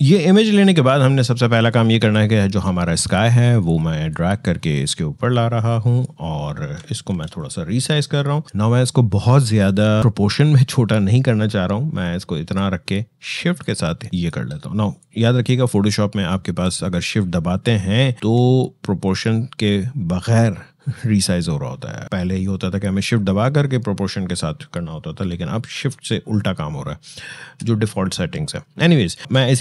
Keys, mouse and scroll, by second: 1.8-6.9 drag, 6.9 ctrl+t, 8.4 click, 13.4-16.2 shift+drag, 16.2 Up.